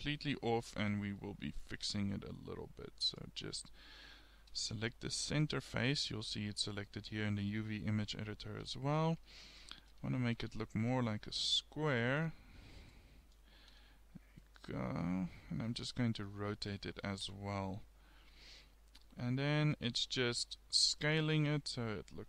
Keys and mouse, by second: 0.9 Tab, 5.1-6.4 middle drag, 8.6 a, 9.3 a, 10.4 g, 13.7 a, 16.6 r, 19.2 s, 20.4 s, 21.3 g.